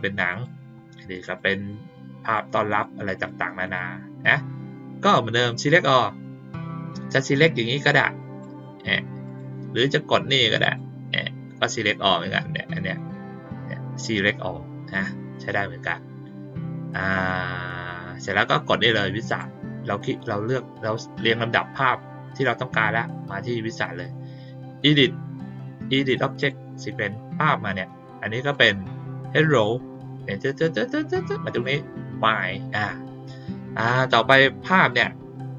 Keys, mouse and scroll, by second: 0.2 click, 1.2 click, 2.2 click, 2.6 click, 3.1 click, 3.6 click, 5.0 click, 7.1-8.4 drag, 9.2 click, 10.6 click, 19.2 click, 26.3 click, 28.5 click, 31.5 click, 34.8 click.